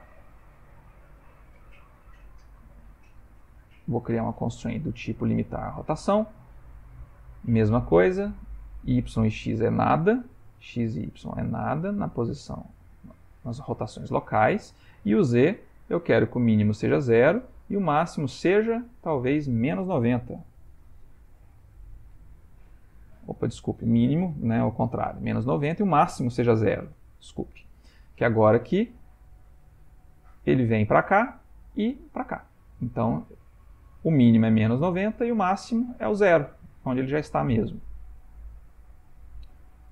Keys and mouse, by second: 3.8 click, 7.6 middle click, 10.8 click, 11.1 click, 11.9 click, 14.1 shift+middle click, 16.0 click, 16.6 middle click, 19.2 click, 23.4 click, 28.5 click, 29.0 r, 36.9 ctrl+middle click, 37.5 shift+middle click, 38.1 ctrl+middle click, 38.7 middle click.